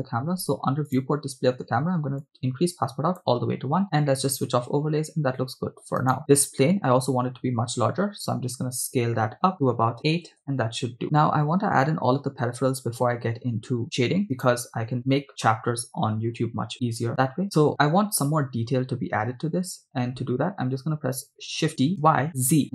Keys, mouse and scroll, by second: 0.9 click, 2.2 scroll down 1, 2.4 click, 4.0 click, 6.1 right click, 8.3 s, 10.1 8, 10.3 Return, 14.4 right click, 15.0 click, 21.7 shift+d, 22.1 y, 22.3 z.